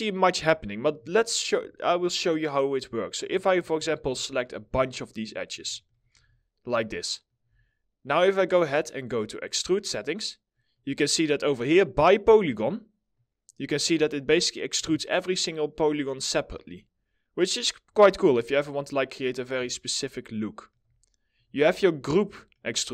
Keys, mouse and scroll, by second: 0.7 middle click, 1.8 ctrl+click, 3.4 middle click, 3.8 alt+middle click, 4.4 ctrl+click, 4.7 ctrl+double click, 5.0 ctrl+click, 5.3 middle click, 5.5 scroll down 1, 5.8 alt+middle click, 6.3 scroll up 1, 6.6 middle click, 10.1 middle click, 19.3 alt+middle click, 22.1 alt+middle click.